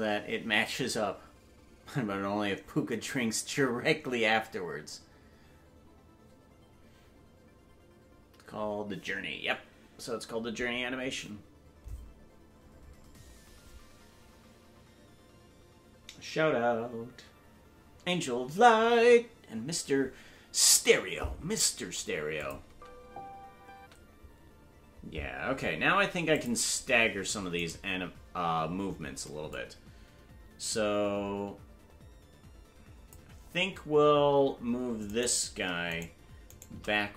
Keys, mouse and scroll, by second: 22.4 click, 22.6 space, 26.3 click, 26.3 space, 27.8-28.7 right drag, 29.5-33.1 drag, 35.9-37.1 shift+right drag.